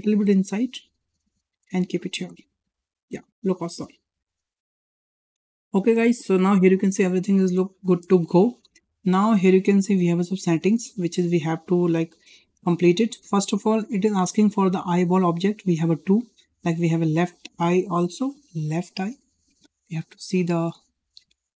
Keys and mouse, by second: 0.5-0.9 middle drag, 1.3 click, 2.2-2.5 middle drag, 4.4 shift+middle click, 7.5-7.8 shift+middle drag, 8.7 shift+middle drag, 15.8 click, 16.6-21.5 drag.